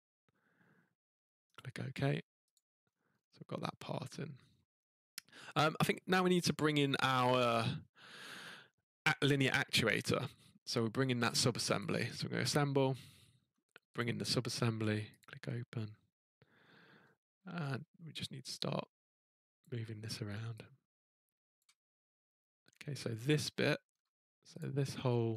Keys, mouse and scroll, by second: 0.0 scroll, 1.5 click, 1.6 scroll, 2.5 click, 2.8 scroll, 3.1 scroll down 1, 3.1 scroll down 2, 3.2-3.9 scroll, 4.7 middle click, 4.7-5.8 scroll down 4, 11.8 click, 13.3 middle click, 14.0 click, 15.2 click, 16.6 middle click, 16.7 middle click, 16.7 middle click, 16.9 middle click, 17.3 scroll, 19.6 click, 21.5 click, 21.9-24.1 scroll, 24.6 click, 24.9 middle click, 24.9-25.3 scroll, 25.0 middle click.